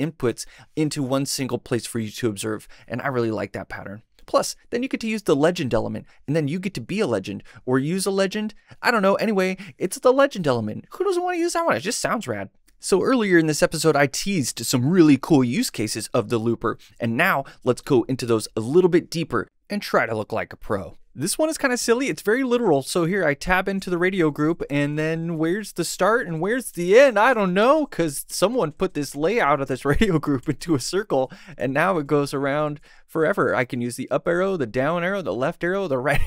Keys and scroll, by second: 33.7 Up, 34.2 Down, 35.0 Right, 35.7 Left.